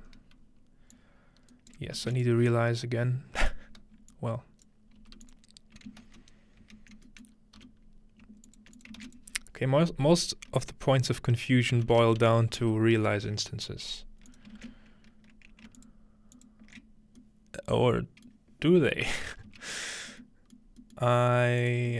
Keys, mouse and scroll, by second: 0.1 scroll up 2, 0.9 click, 2.1 shift+a, 2.3-7.1 drag, 5.0 f, 6.0 ctrl+z, 6.1 typing, 7.3 middle click, 7.4-9.0 typing, 8.5-10.8 ctrl+drag, 11.7-12.7 typing, 13.0 Return, 14.3 click, 14.6 ctrl+space, 15.8 alt+shift+click, 16.4 alt+shift+click, 16.8-18.2 drag, 17.2-19.7 middle drag, 18.6-19.7 scroll down 1, 20.6 middle drag, 21.0 middle click, 21.2-21.9 scroll up 1, 21.6 click.